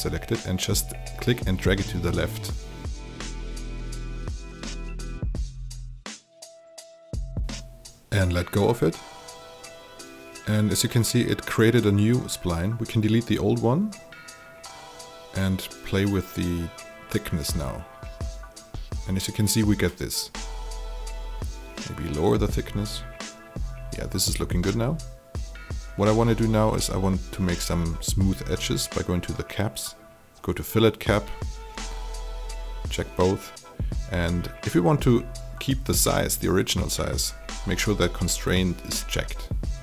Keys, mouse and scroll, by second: 12.3 Delete, 13.9-17.8 drag, 18.0 alt+click, 18.9 alt+right click, 19.3 alt+click, 21.5 click, 21.7 click, 24.0-26.4 alt+drag, 27.3 click, 27.6 shift+click, 36.8 alt+click.